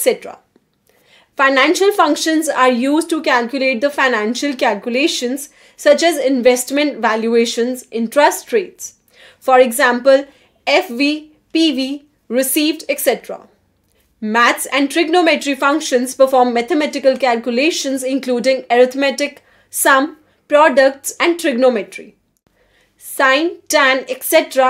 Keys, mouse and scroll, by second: 0.0-0.2 typing, 1.8 1, 2.3 shift+0, 3.2 Return, 4.5 click, 7.9 click, 11.4 click, 11.9-15.7 typing, 16.1 Return, 20.6-22.3 typing.